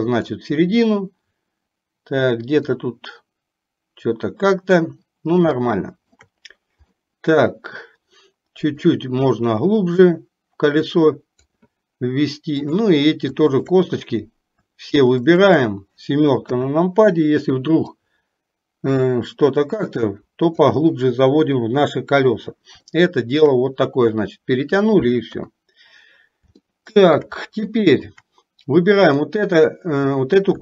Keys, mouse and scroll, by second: 2.7-4.7 drag, 5.7 shift+middle click, 7.1 middle click, 9.2-11.6 drag, 12.7 click, 13.6 shift+click, 15.3 shift+click, 16.6 KP_7, 18.1-20.7 drag, 23.0 shift+middle click, 25.3 KP_3, 26.7 shift+middle click, 27.7 shift+middle click, 29.1 click.